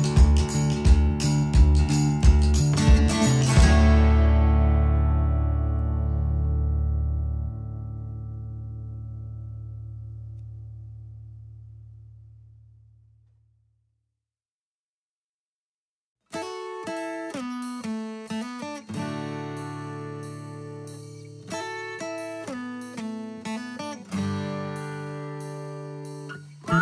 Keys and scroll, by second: 7.3 space, 8.4 t, 9.8 typing, 13.8 space, 16.3 ctrl+z, 21.7 u, 23.7 o.